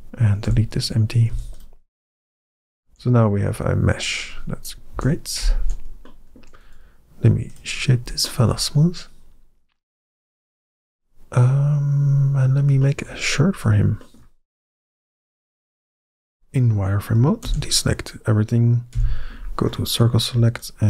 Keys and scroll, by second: 0.3 x, 1.1 x, 2.7 Tab, 4.8 KP_1, 5.4 Tab, 13.3 Tab, 15.1 z, 18.8 c.